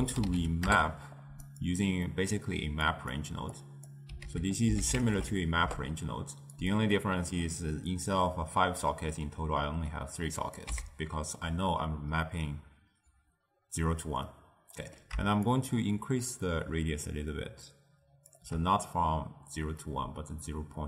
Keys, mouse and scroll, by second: 2.1-3.0 middle drag, 3.0 click, 3.6 click, 4.3 ctrl+a, 7.1-10.1 middle drag, 10.5 click, 10.8 x, 14.3-15.6 middle drag, 15.6-18.6 shift+drag.